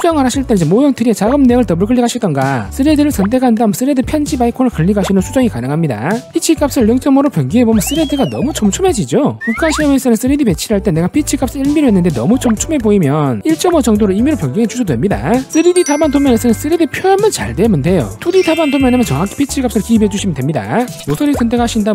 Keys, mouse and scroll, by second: 1.0 click, 1.2 click, 2.6 click, 3.2 click, 4.7 click, 7.5 click, 8.4 click, 9.1 click, 9.7 click, 10.4 middle click, 12.5 click, 13.4 click, 14.7 click, 15.7 click, 16.8 click, 17.6 click, 21.4 click.